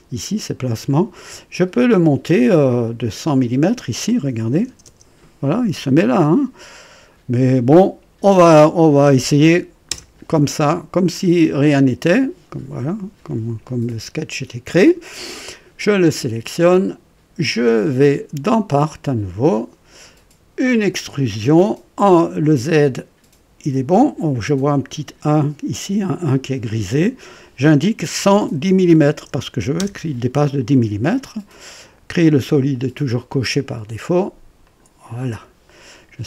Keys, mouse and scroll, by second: 0.3 click, 0.8 click, 2.8 click, 4.4 KP_1, 4.6 KP_0, 4.8 KP_0, 8.5 click, 10.0 KP_0, 11.6 click, 14.9 click, 17.6 click, 18.9 click, 20.6 click, 28.1 KP_1, 28.5 KP_1, 29.7 KP_0, 32.1-34.0 drag, 33.8 typing, 34.6 click.